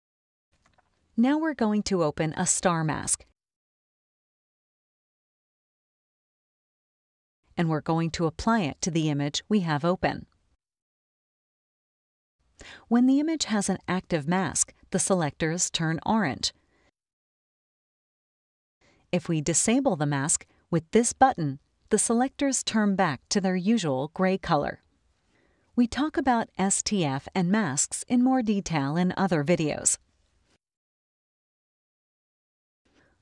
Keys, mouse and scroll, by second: 2.9 click, 6.2 scroll up 2, 6.2-7.5 drag, 8.3-11.0 drag, 12.0 click, 16.7 click, 17.7 click, 22.4 click, 23.7 click, 25.1 click, 26.4 click, 27.6 click, 29.2 click, 30.3 click.